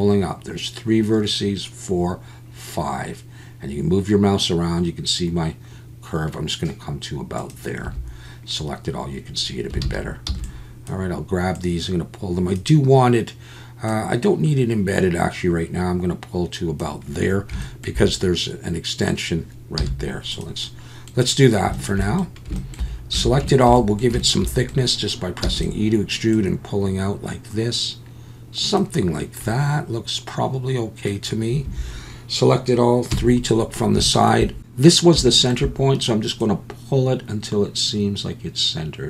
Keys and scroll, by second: 7.8 a, 9.8 alt+a, 10.3 b, 19.8 z, 23.1 a, 25.4 e, 31.6 a, 33.1 KP_3.